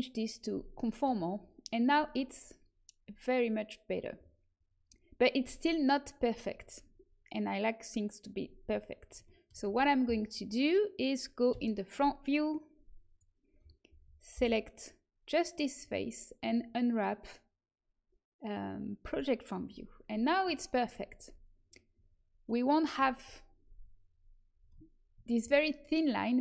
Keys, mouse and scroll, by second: 9.6 a, 11.4 KP_1, 13.1-14.7 drag, 14.3 l, 16.3-19.1 drag, 19.6-23.1 middle drag.